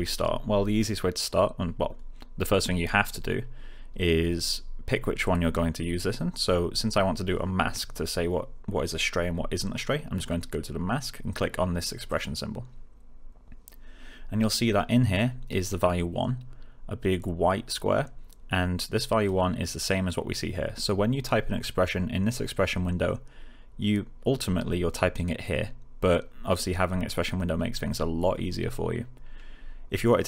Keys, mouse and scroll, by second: 12.0 click, 14.3-14.9 click, 18.9 click.